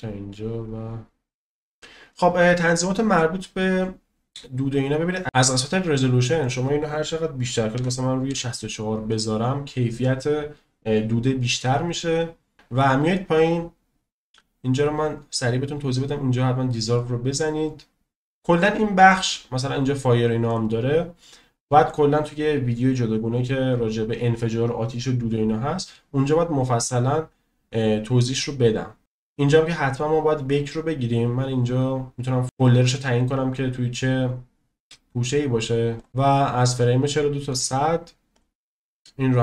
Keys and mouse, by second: 3.1 click, 5.4 space, 6.4-9.3 drag, 14.9 click, 16.9 click, 38.3-39.4 drag.